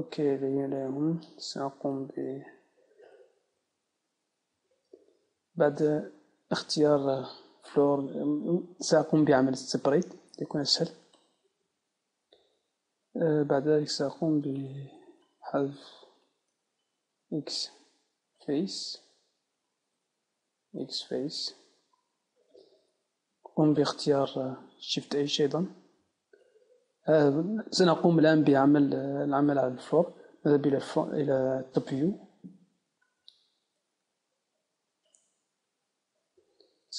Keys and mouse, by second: 0.8 c, 3.2-4.8 right drag, 5.0 middle click, 10.0 p, 13.9-18.0 right drag, 17.0 x, 19.6-21.4 right drag, 20.6 x, 23.4 Tab, 23.9-25.4 right drag, 25.4 shift+h, 29.3-31.1 middle drag, 31.1 KP_7.